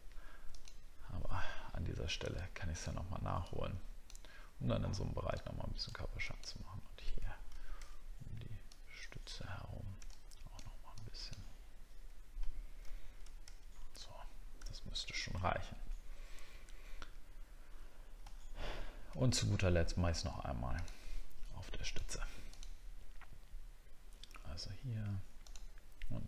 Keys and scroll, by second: 7.5 ctrl+z, 12.8 ctrl+z, 13.5 alt+scroll down 1, 15.1 alt+scroll down 1, 18.3 alt+scroll up 1.